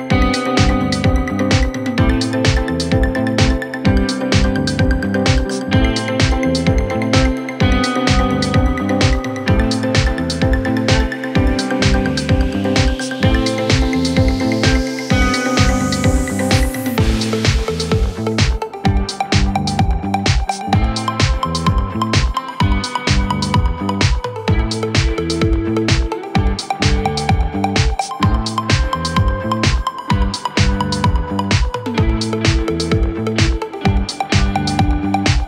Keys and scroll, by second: 5.1 4, 7.1 Delete, 9.5 2, 10.2 4, 13.6 3, 16.7 ctrl+z, 17.6 4, 19.6 F1, 20.5 Delete, 20.8 ctrl+z, 23.4 F1, 25.9 F1.